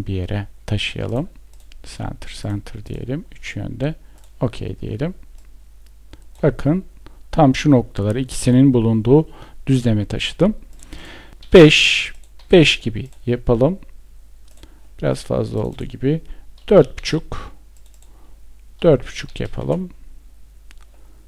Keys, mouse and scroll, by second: 19.0 Return.